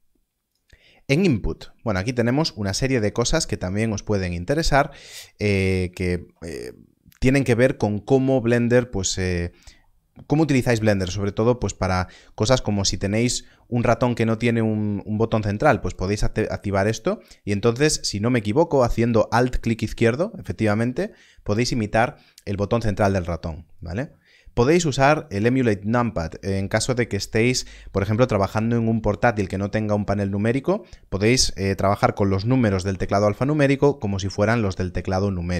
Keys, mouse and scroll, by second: 1.8-4.4 scroll down 1, 5.9-7.8 scroll down 1, 15.8-17.8 scroll down 1, 23.7 click.